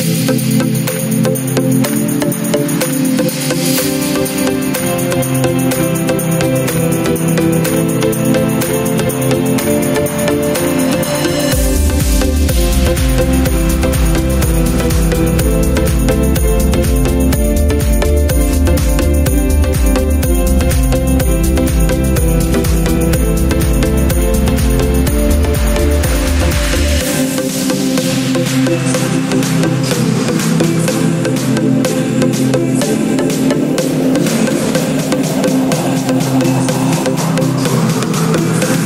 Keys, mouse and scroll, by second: 35.0 click.